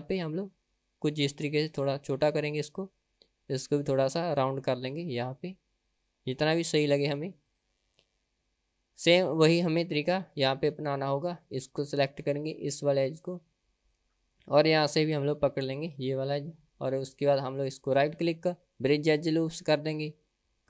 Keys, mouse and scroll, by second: 8.2-9.2 middle drag, 10.1 KP_1, 11.6 click, 16.0 shift+click, 17.3 middle click, 18.0-19.5 right drag.